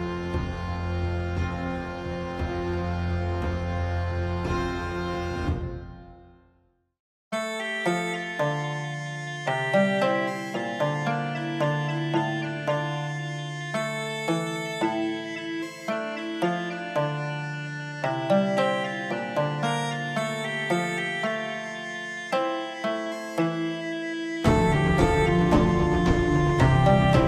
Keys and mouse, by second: 4.7 middle click, 6.1 KP_7, 7.7 click, 8.6 click, 10.2 KP_1, 13.9 g, 19.1 KP_7, 20.6 click, 23.1 click, 25.3 s.